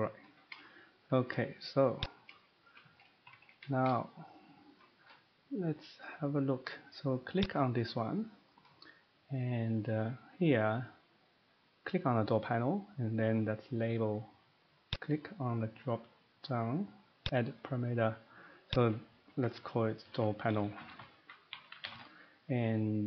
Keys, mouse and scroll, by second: 0.3 middle click, 0.5 middle click, 1.0 shift+middle click, 1.2-1.7 shift+middle click, 1.3 middle click, 1.6 scroll down 3, 2.1 click, 2.6 shift+middle click, 3.3 Escape, 3.4 Escape, 3.5 Escape, 7.4 click, 14.9 click, 17.2 click, 18.7 click, 20.0-21.9 typing.